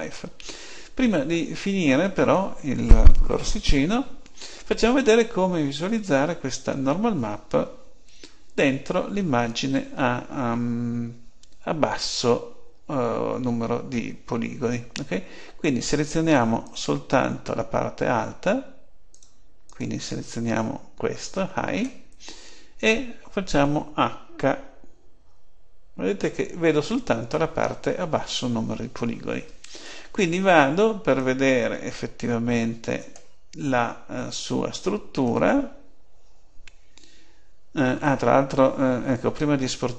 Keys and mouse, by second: 16.6-18.5 drag, 19.0-21.3 drag, 25.1 h.